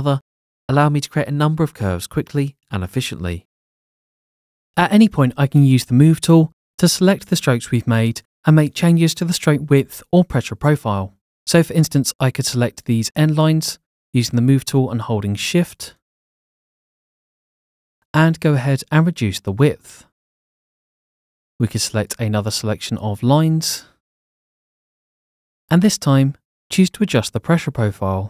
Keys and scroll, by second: 0.5 Escape, 1.7 Escape, 4.4 Escape, 6.6 Escape, 7.1 v.